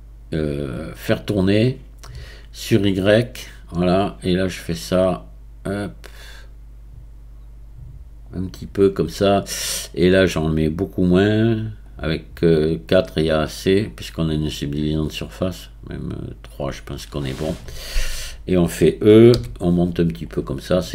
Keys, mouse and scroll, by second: 3.4 click, 4.7-7.6 drag, 11.2-18.0 drag, 18.0-20.2 scroll down 1, 20.2 e.